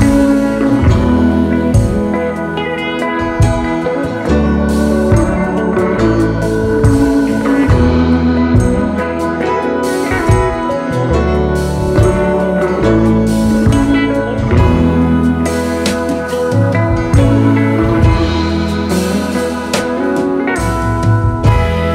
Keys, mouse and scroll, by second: 0.0-0.8 typing, 0.5 double click, 0.9 double click, 1.7 double click, 2.0 typing, 3.3-6.3 typing, 6.1 alt+scroll down 1, 7.1 alt+scroll down 1, 7.3 space, 8.8 alt+scroll up 1, 9.0-10.0 space, 15.9 v, 16.2 alt+scroll down 1, 16.3 space, 18.8-19.5 typing, 19.0 alt+scroll down 1.